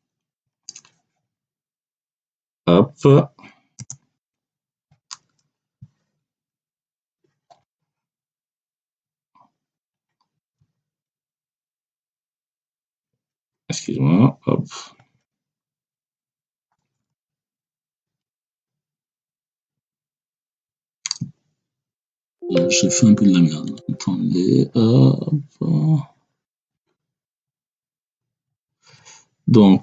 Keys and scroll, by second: 0.2 1, 3.7 space, 4.1 3, 9.7 1, 12.8 ctrl+alt+3, 13.7 BackSpace, 14.9 3, 18.2 ctrl+alt+[, 19.5 3, 20.4 BackSpace, 21.9 Return, 27.2 BackSpace.